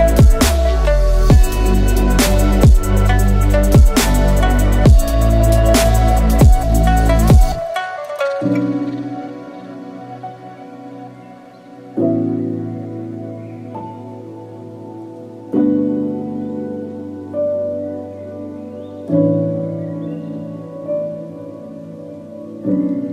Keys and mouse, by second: 1.4-5.2 drag, 6.0 2, 6.9 click, 9.9 click, 10.2 z, 10.5 click, 11.6 z, 11.7 click, 12.3 z, 13.4 click, 13.4 z, 14.0 shift+click, 14.3 click, 15.5-17.6 drag, 17.6 ctrl+z, 18.9-23.1 drag.